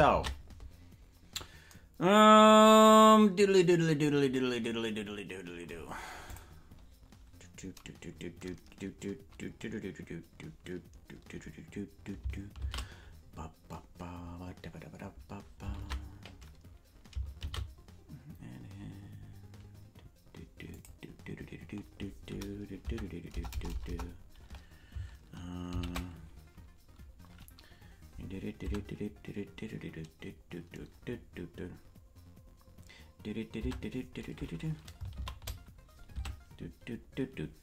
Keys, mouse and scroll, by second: 3.4 ctrl+s, 6.2 click, 17.3 ctrl+Tab, 17.3 shift+a, 23.4 Tab, 23.4 BackSpace, 25.6 BackSpace, 25.6 shift+d, 28.6 Tab, 36.1 Tab, 36.1 shift+a.